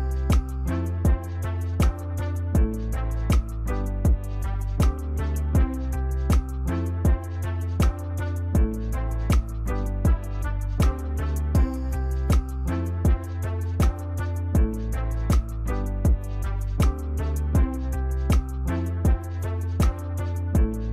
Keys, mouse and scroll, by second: 0.0 right click, 4.7 ctrl+-.